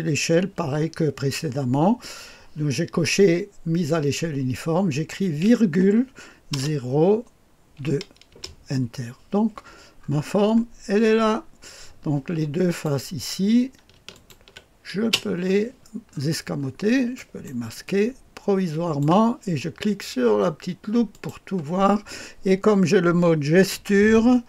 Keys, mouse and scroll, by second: 5.6 ,, 6.5 KP_0, 7.7 KP_2, 8.3 Return, 9.9-11.3 scroll up 1, 11.3 scroll up 1, 11.3-12.4 scroll down 1, 12.7 click, 14.1 ctrl+click, 15.0 space, 16.0-17.4 scroll up 1, 17.1-19.0 drag, 21.1 click.